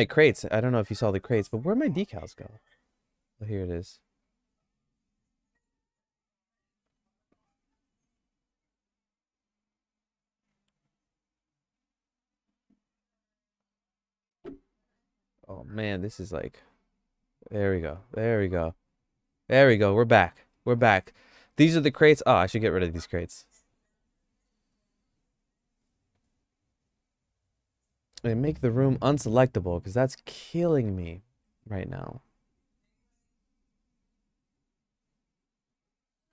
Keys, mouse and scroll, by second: 0.4 shift+middle click, 2.3 click, 4.1 click, 5.8 click, 7.1 click, 8.9 click, 13.2-14.8 drag, 16.7 click, 17.4 click, 17.9 click, 18.6 click, 20.5 middle click, 20.8-21.9 shift+middle drag, 22.7 middle click, 24.8 shift+click, 25.4 click, 26.0 click, 32.5 click, 34.6 click.